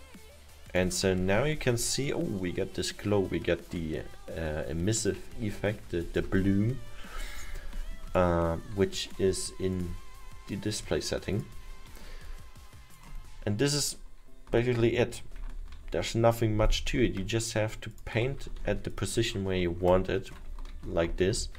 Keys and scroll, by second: 15.7 ctrl+z, 20.9 ctrl+z, 21.2 ctrl+z.